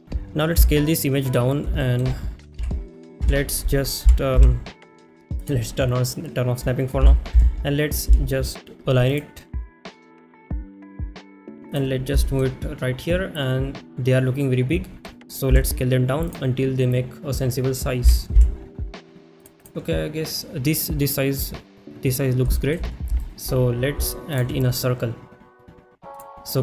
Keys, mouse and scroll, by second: 0.0 n, 1.0 s, 1.8 shift+middle click, 5.4 click, 5.4 KP_1, 5.4 g, 5.4 z, 6.0 click, 7.9 click, 9.6-11.7 typing, 10.3 click, 10.4 shift+middle click, 11.1 click, 11.7 click, 12.2 shift+middle click, 16.3 click, 16.3 s, 19.7 g, 19.7 z, 22.5 shift+middle click, 23.2 shift+middle click, 26.2-26.6 drag.